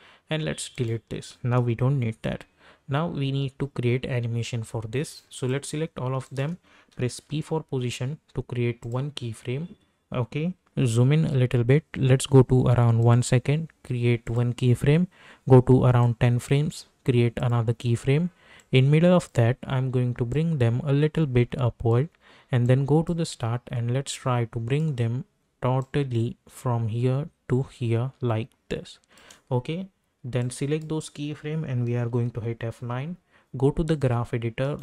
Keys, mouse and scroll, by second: 5.3 click, 6.2 shift+click, 7.3 p, 8.8 click, 10.7 =, 10.9 =, 11.3 =, 13.0-30.4 drag, 30.4-32.2 drag, 32.2 F9, 33.9 click, 34.6 right click.